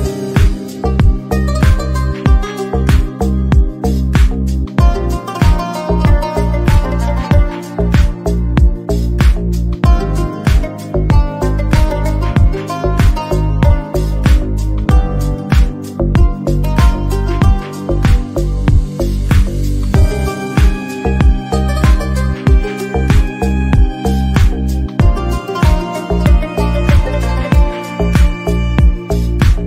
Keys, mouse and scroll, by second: 0.0 g, 1.3 a, 1.5 Tab, 1.7 click, 2.3-2.8 shift+drag, 2.8 ctrl+l, 3.1-3.5 middle drag, 3.7 ctrl+a, 4.0 click, 4.1 middle drag, 4.3 click, 4.5-5.1 middle drag, 5.1 scroll down 1, 5.4-5.7 scroll up 1, 5.7-6.3 middle drag, 6.5 Tab, 6.8 alt+z, 6.9 click, 7.2 middle click, 7.5 g, 8.4 alt+z, 8.5 middle click, 9.0 s, 11.2 middle click, 11.6 g, 12.1 shift+middle click, 12.2 scroll up 2, 12.3 middle click, 13.5 ctrl+l, 13.9 ctrl+z, 14.1 ctrl+i, 14.3 g, 14.8 middle click, 16.4 scroll down 2, 16.5-17.0 scroll up 2, 16.6 middle click, 17.0 middle click, 18.0 ctrl+i, 18.3 r, 19.7 g, 20.7 middle click, 21.7 scroll down 1, 21.9 a, 22.1 g, 22.8 middle click, 23.2 scroll down 2, 23.4 shift+middle click, 23.9 Tab, 24.1-24.5 typing, 24.5 click, 24.7 click, 24.9-25.3 middle drag, 25.3 scroll down 1, 25.4-26.0 shift+middle drag, 26.7-27.0 middle drag, 27.0 scroll up 1, 27.2 shift+middle click, 27.4 scroll down 1, 28.1 shift+a, 28.3 click, 28.7 shift+d, 29.0 r.